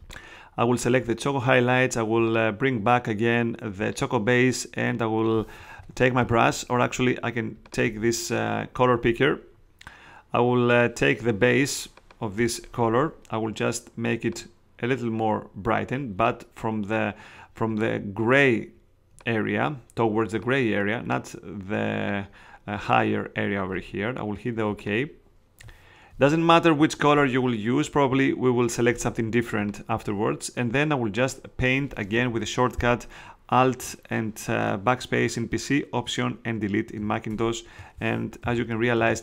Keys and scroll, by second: 37.4 alt+BackSpace, 38.4 alt+super+d, 39.0 super+space.